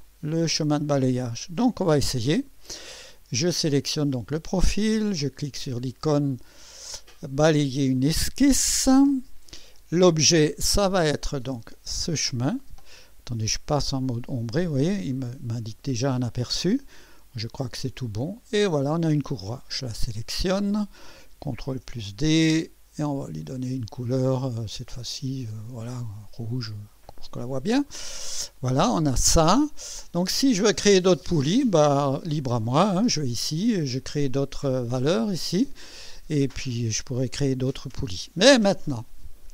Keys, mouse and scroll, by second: 7.9 click, 10.4 click, 12.0 click, 13.7 2, 17.6 click, 20.1 click, 21.6 ctrl+d, 23.1 click, 25.0 click, 26.2 click, 27.2 click, 27.9 click, 28.3-30.9 drag, 31.5 click, 32.6 click, 37.0 click.